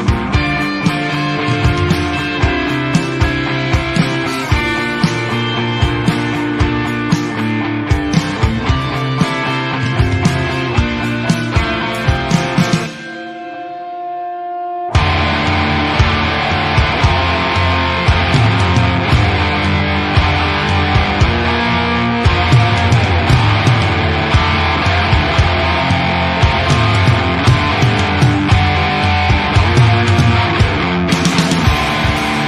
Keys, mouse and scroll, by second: 0.2 alt+a, 0.4 KP_0, 0.7-1.3 scroll down 3, 0.9 Tab, 1.3 alt+a, 1.5 shift+middle drag, 1.8-2.7 scroll up 7, 2.0 shift+middle click, 2.7 shift+middle click, 3.1 Tab, 3.8 click, 4.8 click, 6.6 s, 7.3 s, 7.8 l, 8.1 s, 9.6 click, 10.1 alt+a, 10.6 shift+middle click, 10.7-11.2 scroll up 1, 11.2 l, 11.6 s, 12.3 alt+a, 13.2 l, 13.6 s, 14.4 s, 15.1 s, 15.9 click, 16.1 alt+a, 16.4 shift+middle click, 16.8 scroll down 2, 16.9 Tab, 17.1 click, 17.4 Tab, 17.7 alt+a, 18.2 l, 18.5-19.1 scroll up 2, 19.1 s, 21.1 s, 22.6 shift+middle click, 22.9 alt+a, 23.1 middle click, 23.9-24.6 scroll up 7, 24.6 shift+middle click, 24.8 scroll down 1, 25.0-25.3 shift+middle drag, 25.3 z, 25.8 alt+a, 26.8 l, 27.4 s, 28.3 s, 29.4 alt+a, 29.6 middle click, 29.9-30.3 scroll up 1, 30.3 z, 30.4 alt+a, 30.8 shift+middle click, 31.1 click, 31.5 Tab, 31.8 middle click, 32.0-32.3 scroll up 2, 32.3 Tab, 32.4 scroll down 4.